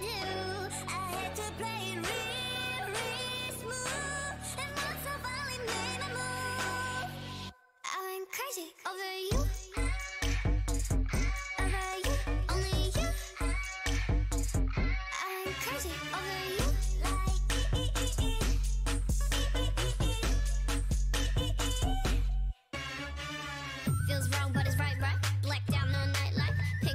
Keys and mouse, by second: 2.7 e, 4.3-5.9 drag, 4.7 e, 5.4 a, 5.9-7.0 middle drag, 6.8 a, 7.0 a, 7.3 a, 7.5 w, 8.8 a, 9.0 Tab, 11.3 z, 12.1 KP_1, 12.8 Tab, 13.4-14.6 drag, 14.2 ctrl+Tab, 15.1 g, 16.2 o, 16.7 g, 21.5-24.4 middle drag, 22.9 z.